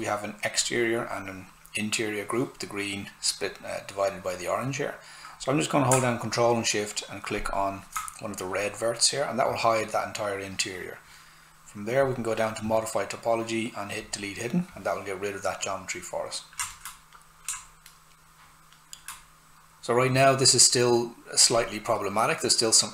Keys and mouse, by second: 5.9 ctrl+shift+Num_Lock, 5.9 ctrl+shift+click, 12.0 click, 16.6 alt+click, 16.7 alt+right click, 21.6 click.